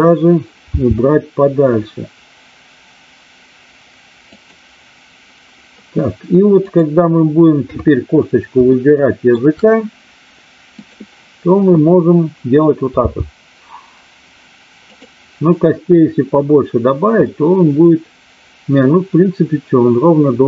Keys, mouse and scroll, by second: 0.7 g, 4.3 click, 6.4 click, 7.6 KP_3, 8.7-9.3 shift+middle drag, 10.7 click, 13.0 g, 14.8 click, 17.3-20.4 middle drag.